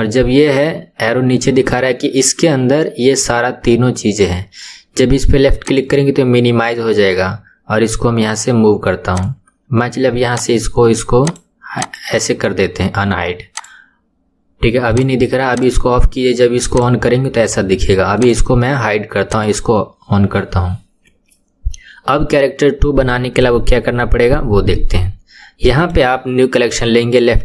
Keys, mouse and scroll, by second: 5.6 click, 9.1 click, 10.3 click, 11.2 click, 11.7 click, 13.5 click, 14.9 click, 15.5 click, 16.7 click, 18.2 click, 19.3 click, 25.7 right click.